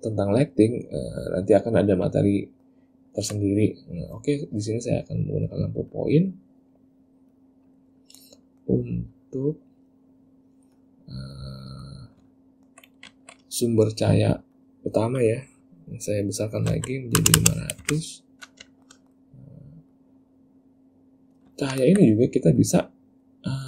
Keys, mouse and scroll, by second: 2.6 ctrl+middle click, 3.2 ctrl+middle click, 3.6 middle click, 6.1 click, 7.5 click, 8.1 middle click, 8.6 middle click, 9.3 click, 10.9 click, 11.8 middle click, 12.4 ctrl+middle click, 14.7 click, 17.5 KP_0, 18.8 shift+middle click, 19.1 middle click, 20.1 click, 21.8 ctrl+middle click, 22.7 click.